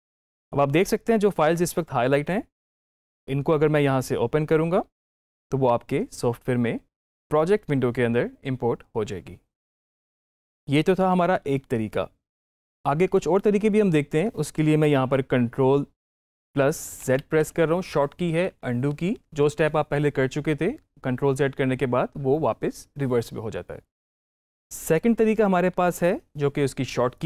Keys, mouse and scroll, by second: 4.9 click, 16.9 ctrl+z.